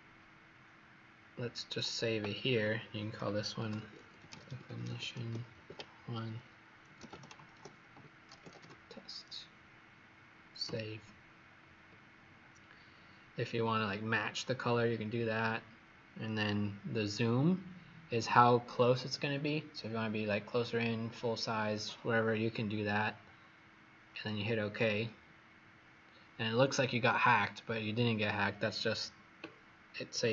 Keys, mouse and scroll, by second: 3.5-6.1 typing, 7.2-9.0 typing, 10.6 click.